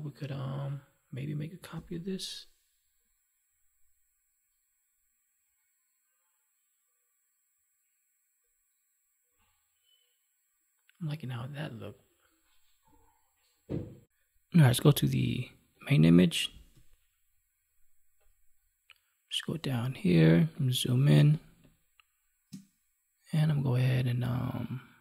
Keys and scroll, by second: 1.7 ctrl+j, 21.1 space.